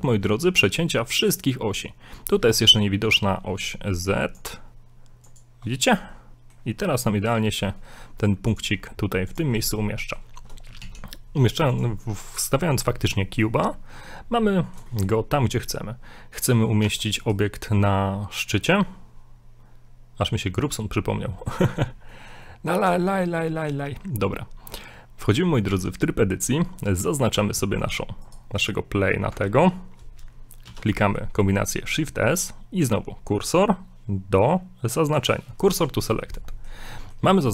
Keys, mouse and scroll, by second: 0.0 scroll up 2, 0.4 shift+middle click, 4.3 click, 5.9 middle click, 8.5 click, 10.0 middle click, 10.8 shift+a, 13.7 middle click, 14.9 shift+middle click, 15.6 middle click, 16.4 right click, 16.9 Tab, 18.5 Tab, 21.4 middle click, 22.1 shift+middle click, 22.5 middle click, 23.1 shift+middle click, 23.5 middle click, 25.7 Tab, 27.8 right click, 28.3 right click, 28.6 right click, 29.4 ctrl+z, 30.7 shift+s, 35.7 scroll up 1, 36.5 shift+middle click, 36.9 shift+middle click.